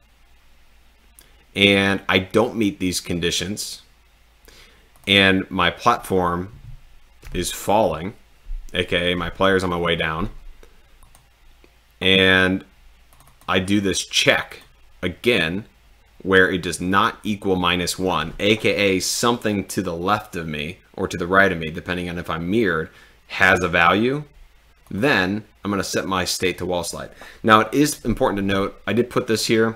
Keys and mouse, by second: 5.0 click, 11.1 click, 13.2 click, 14.5 click, 24.9 click, 29.4 click.